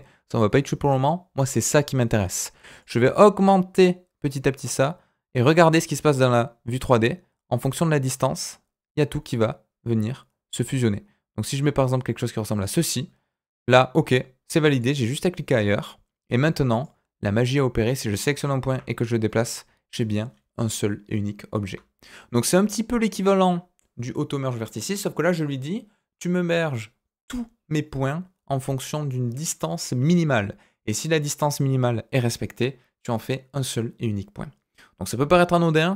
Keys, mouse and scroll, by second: 2.8-11.9 drag, 12.6-14.2 middle drag, 14.7 click, 15.0 middle click, 17.8 click, 18.6 g.